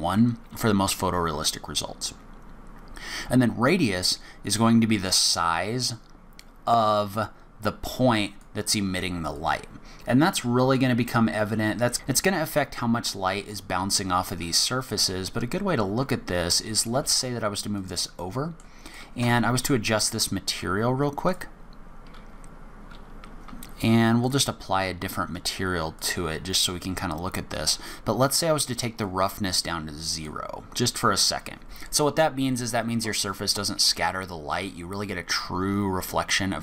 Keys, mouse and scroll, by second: 5.3 click, 9.3 click, 15.0 g, 18.2 middle click, 18.8 click, 19.2 Tab, 19.5 click, 21.2 click, 23.6-24.0 scroll up 2, 24.2 click, 25.9 click, 28.1-28.9 scroll down 1, 29.0 click.